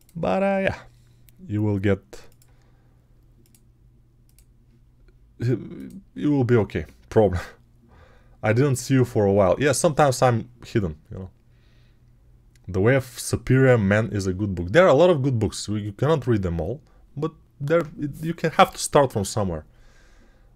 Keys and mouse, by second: 0.0-20.5 middle drag.